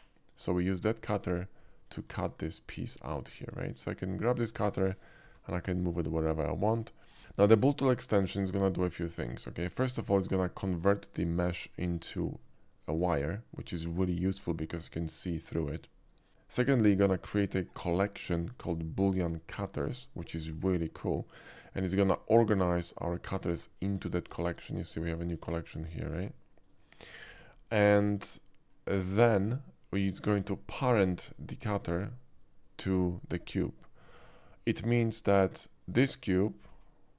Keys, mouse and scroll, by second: 1.0 click, 1.5-2.0 middle drag, 2.9-3.4 middle drag, 4.5 click, 5.3 g, 6.6 right click, 7.2 middle click, 7.4 shift+middle drag, 8.4 shift+click, 8.8 shift+middle drag, 9.3 shift+middle click, 9.8 shift+middle drag, 10.5 shift+click, 11.5-11.9 shift+middle drag, 14.6-16.3 shift+middle drag, 16.8 shift+middle click, 25.0 click, 25.5 click, 26.0 click, 26.6 click, 27.5 middle drag, 28.0 middle click, 28.3-28.9 middle drag, 30.0 shift+middle click, 30.3-30.9 shift+middle drag, 31.1 shift+middle click, 31.4-31.7 shift+middle drag, 35.7 click, 36.7 g.